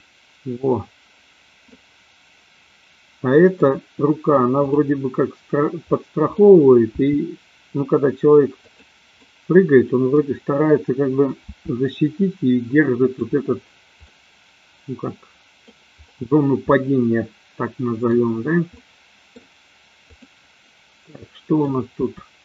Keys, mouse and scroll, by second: 1.7-3.6 middle drag, 4.6 click, 5.9 middle click, 6.9 g, 8.7 click, 9.1-10.2 middle drag, 11.4 r, 14.0-15.7 middle drag, 16.7-18.2 middle drag, 18.6 middle click, 21.1 middle click, 21.9 r.